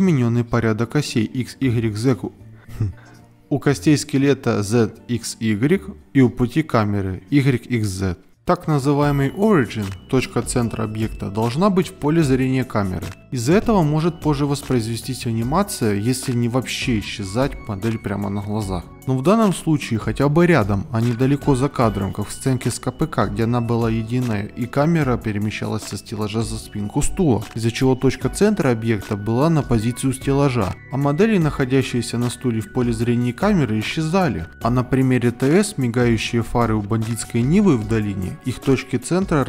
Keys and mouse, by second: 0.6 ctrl+Tab, 1.9 ctrl+Tab, 2.4-3.0 drag, 3.4 ctrl+Tab, 5.1 click, 5.6 click, 6.2 KP_Decimal, 7.6 click, 8.4 alt+KP_1, 9.5 KP_Decimal, 10.0 middle click, 10.7 Tab, 10.9 a, 11.0 g, 12.2 shift+middle click, 14.2 KP_0, 14.8 shift+middle click, 15.3 z, 15.9 alt+g, 15.9 alt+h, 16.4 alt+h, 16.7 ctrl+Tab, 17.6 ctrl+z, 17.6 ctrl+z, 17.7 ctrl+z, 17.9 ctrl+z, 18.3 ctrl+Tab, 18.7 g, 19.9 z, 21.1 click, 22.2 click, 23.2 click, 23.6 click, 23.8 middle drag, 24.8 KP_Decimal, 25.5 ctrl+Tab, 25.9 ctrl+Tab, 26.1 middle click, 27.7 KP_Decimal, 28.1 ctrl+Tab, 28.3 a, 28.5 KP_0, 29.0 middle drag, 29.5 g, 31.1 ctrl+Tab, 31.6 KP_Decimal, 32.0 ctrl+Tab, 32.1 a, 32.3 alt+g, 32.4 alt+r, 32.7 ctrl+Tab, 32.8 KP_Decimal, 33.2 middle drag, 33.5 shift+middle drag, 34.0-34.6 middle drag, 35.4 KP_0, 36.5 shift+click.